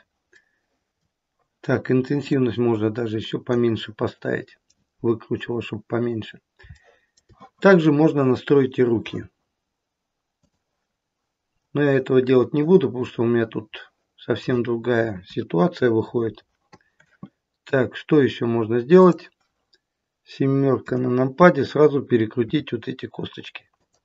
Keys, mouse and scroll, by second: 0.3 middle click, 2.2 click, 4.0 middle click, 6.2 scroll down 2, 6.6 shift+middle click, 10.7 click, 11.6 middle click, 13.2 middle click, 15.2 KP_1, 18.9 click, 20.7 KP_7, 22.4 r.